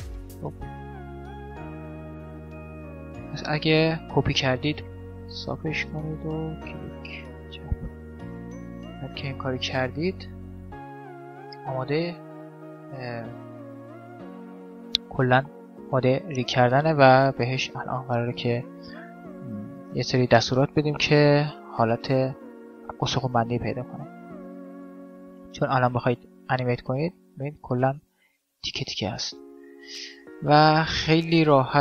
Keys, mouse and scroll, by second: 0.3-3.7 middle drag, 3.9 middle click, 4.7 ctrl+r, 4.7-6.1 right drag, 4.8 ctrl+r, 6.9-15.4 middle drag, 15.9-19.8 middle drag, 20.5-22.3 middle drag, 23.2-26.3 middle drag, 25.5 Tab, 26.9-28.9 right drag, 30.0 Tab, 31.2 middle click.